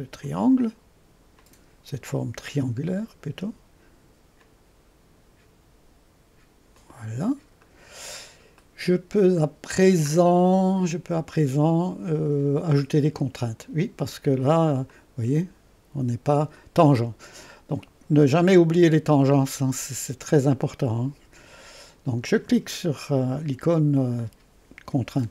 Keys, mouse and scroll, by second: 0.3 click, 1.4 click, 2.9 click, 4.4 click, 6.8 click, 7.7 right click, 8.2-8.6 scroll up 2, 8.6 right click, 9.6-12.6 middle drag, 14.9-17.3 drag, 22.3 click.